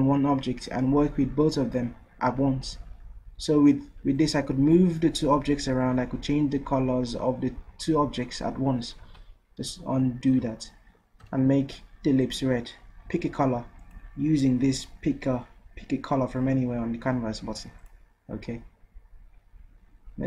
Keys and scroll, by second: 9.0 ctrl+z.